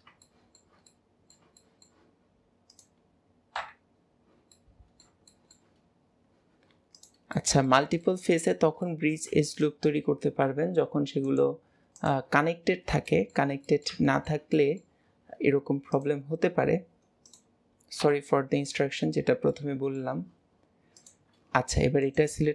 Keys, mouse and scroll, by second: 0.0-0.3 scroll down 2, 0.3 shift+middle click, 0.5-2.7 middle drag, 2.7 click, 3.6 KP_Decimal, 4.6 middle click, 7.0 click, 7.4 middle click, 8.2-9.5 shift+middle drag, 9.5 shift+click, 11.3-12.5 drag, 12.5 scroll down 3, 13.1-15.9 shift+middle drag, 15.9 click, 17.3 click, 18.1 KP_Decimal, 18.9 scroll down 2, 19.6-21.0 middle drag, 21.0 shift+click, 22.1-22.5 drag.